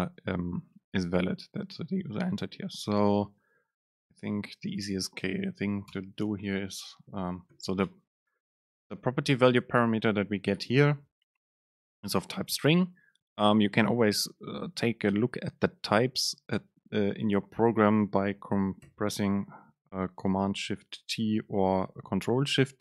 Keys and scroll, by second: 5.0 super+space, 7.9 BackSpace, 10.9 ctrl+shift+super+t, 21.4 ctrl+shift+super+t.